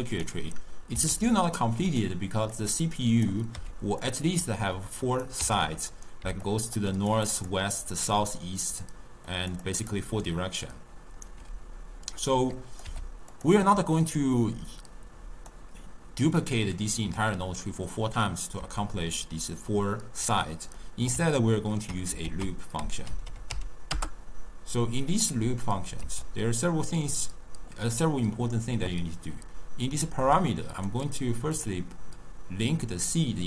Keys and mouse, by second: 1.0 s, 2.6 click, 3.6 g, 4.8 click, 5.9-10.3 typing, 6.5-6.8 drag, 7.0 click, 7.3 click, 9.3 click, 9.7 click, 10.3-11.4 right drag, 11.4 d, 12.0 d, 12.3 click, 12.9 g, 13.6 click, 14.7 click, 17.9-22.3 middle drag, 22.3 ctrl+a, 23.3 o, 25.6-29.3 middle drag, 30.9-31.7 drag, 33.2 click.